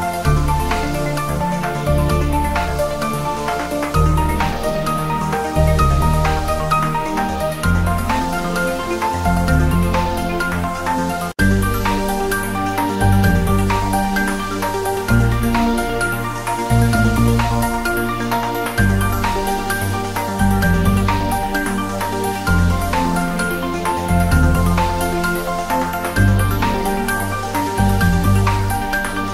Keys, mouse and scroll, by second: 0.2 click, 0.5 g, 1.0 click, 1.2-1.8 scroll down 1, 1.9-3.2 drag, 3.2 scroll down 1, 4.2 click, 4.7-5.1 scroll up 1, 6.1 click, 6.5 s, 7.2 click, 7.5 g, 8.3 click, 10.1 click, 10.4 scroll up 1, 10.8 click, 14.6-15.2 scroll down 1, 15.3 shift+a, 16.1 click, 16.9 r, 17.4 click, 18.1-18.5 scroll up 1, 18.5-20.3 typing, 18.8 click, 19.3 click, 20.0 scroll down 1, 21.7 click, 22.6 click, 23.0-25.3 typing, 23.3 click, 23.8 click, 24.0 scroll up 1, 24.5 scroll down 1, 25.5 click, 26.2 click, 26.6-27.0 scroll down 1, 27.0 g, 28.5 click, 28.8 s.